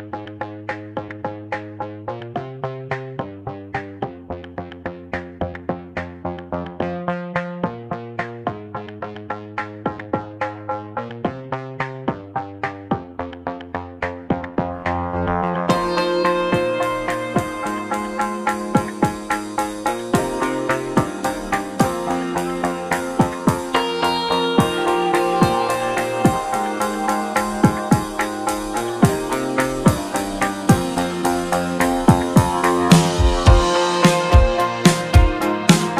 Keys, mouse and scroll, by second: 0.0-0.8 scroll up 1, 0.8-2.6 scroll up 1, 4.1-6.0 drag, 6.0 n, 6.6-7.0 scroll down 1, 7.0-10.4 shift+middle drag, 10.4-11.7 drag, 11.7-14.7 shift+middle drag, 21.0-22.1 scroll down 2, 22.1-24.5 middle drag, 26.5-29.8 drag, 29.8-30.7 middle drag, 30.7-31.8 shift+drag, 33.2 g.